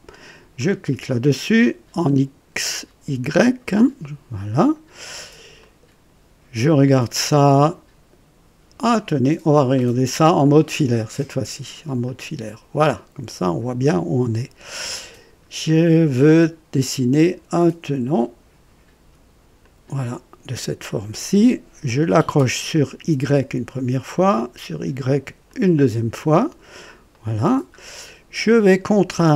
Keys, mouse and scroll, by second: 0.5 click, 4.3 click, 5.2 scroll up 2, 5.6 right click, 10.4 click, 12.0 click, 19.6 click, 23.3 click, 25.4 click, 27.1 right click, 27.7 scroll up 1.